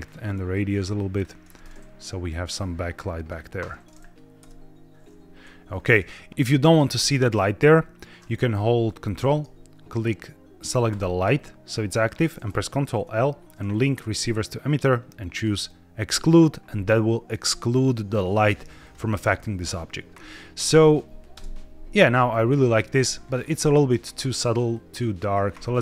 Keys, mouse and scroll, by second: 1.9-3.2 drag, 4.3 KP_0, 6.3 middle click, 6.3-6.7 scroll down 1, 6.7 click, 7.2 click, 10.8 ctrl+click, 12.8 ctrl+l, 17.2-17.6 middle drag, 18.7 click, 21.2 KP_0, 22.0-23.4 scroll up 2, 23.4 click, 24.6 click, 25.2 click, 25.5 ctrl+z.